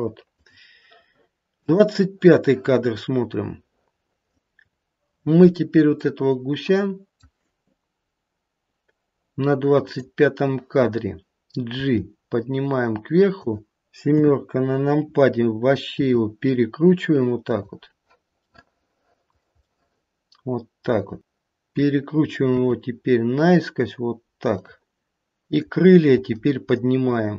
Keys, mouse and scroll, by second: 1.7 click, 4.4 middle click, 4.4-5.3 scroll down 5, 6.0 middle click, 9.9 click, 11.8 g, 14.1 KP_7, 15.8 r, 18.4 middle click, 19.1 middle click, 19.4 scroll up 1, 19.7 middle click, 19.9 middle click, 21.2 middle click, 22.5 r, 25.5 click, 26.2 g.